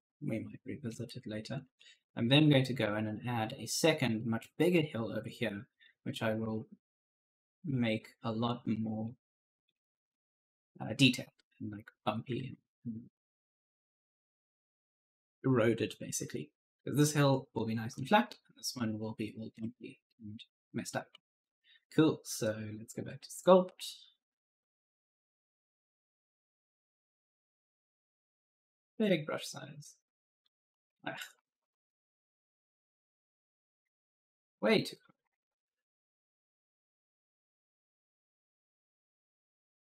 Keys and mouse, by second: 0.8-2.4 typing, 0.9 right click, 5.6 right click, 8.4 click, 10.1 click, 10.4 right click, 19.5 alt+Tab, 20.0-21.7 typing, 20.0 right click, 21.4 right click, 22.8 click, 24.8 click, 27.9 click, 29.4 click, 30.6 ctrl+z, 30.9-31.9 typing, 31.0 right click, 32.4 click, 34.0 ctrl+z, 34.3 click, 35.0 >, 35.0 ., 35.2 Return, 36.5 click, 39.4 right click.